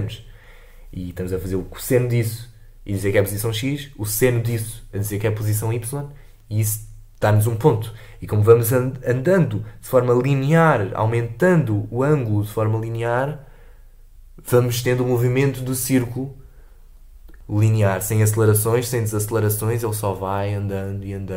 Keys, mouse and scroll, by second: 18.3 space.